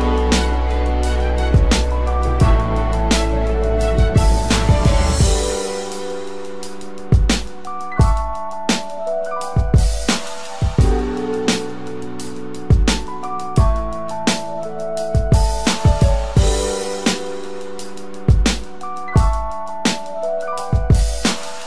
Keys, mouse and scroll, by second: 2.7 ctrl+=, 3.0 typing, 3.6 double click, 4.5 typing, 4.6 double click, 11.0-11.4 typing, 11.5 double click, 12.8-14.7 typing, 13.0 double click, 14.0 double click, 15.1 double click, 15.7 typing, 15.8 double click, 17.2 typing, 17.6 double click, 18.0 ctrl+-, 18.3 ctrl+-, 18.4 ctrl+=, 20.0 alt+click, 20.9 typing.